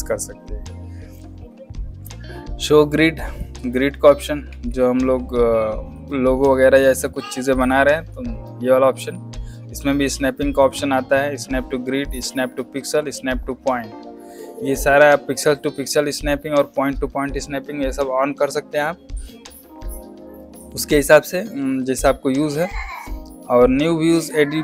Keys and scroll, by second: 4.4 alt+z, 6.9 space.